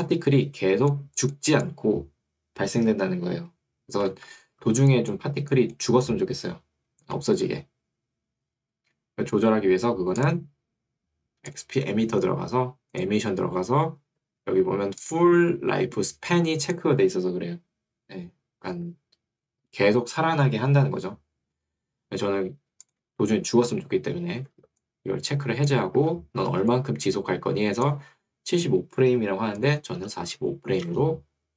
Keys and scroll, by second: 4.2 Escape, 7.4 Escape, 18.8 Escape, 26.0 Escape, 28.2 Escape, 30.0 4, 30.4 5, 31.0 Return.